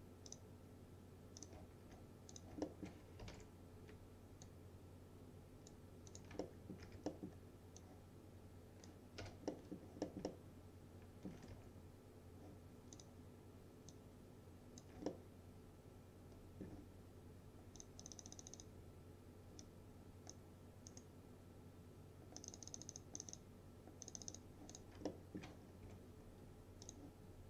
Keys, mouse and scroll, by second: 2.4 click, 2.7 alt+middle click, 3.1-3.9 typing, 4.5-6.0 click, 6.5 alt+middle click, 6.9 w, 7.1 middle click, 7.4-7.9 scroll down 1, 7.9-9.1 drag, 9.3 p, 9.6 middle click, 10.3-11.6 alt+middle click, 11.2-12.1 typing, 13.0 click, 15.1-17.0 alt+middle drag, 17.8 click, 20.9 right click, 22.4 click, 25.1 alt+middle click, 25.7-26.9 scroll up 2, 25.9 F4, 26.9 click.